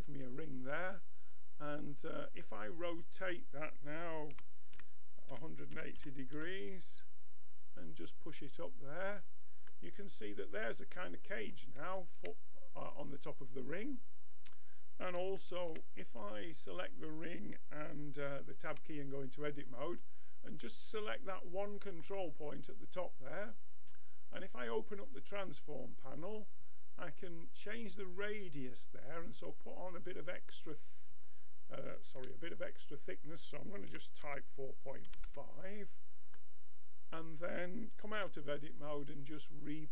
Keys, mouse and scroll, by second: 0.1-1.2 middle drag, 1.2-2.5 drag, 2.5-4.1 middle drag, 4.4 r, 7.5-9.3 drag, 9.7-13.4 middle drag, 13.4-15.4 drag, 15.4-18.7 middle drag, 18.7 Tab, 19.9 click, 20.6 middle click, 24.6-28.6 drag, 31.1-35.9 drag, 36.4 middle click, 38.2 Tab, 39.8-39.9 right drag.